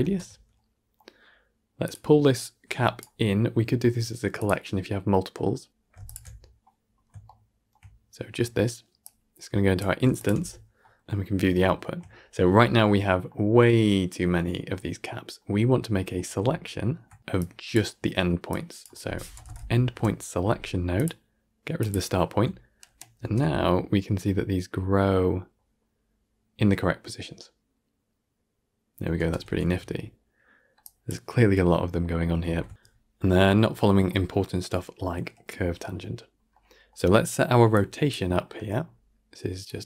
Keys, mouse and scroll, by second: 1.7 click, 2.4 click, 4.3 click, 5.9 alt+shift+click, 6.7 scroll down 4, 7.1-9.7 shift+middle drag, 10.1 alt+shift+click, 10.9-12.0 middle drag, 12.0 scroll up 1, 13.2-18.7 middle drag, 18.7 click, 21.8-22.8 drag, 22.8 shift+Left, 23.1 shift+space, 29.1 shift+space, 30.7 click, 31.2-37.6 middle drag, 37.6-39.8 drag.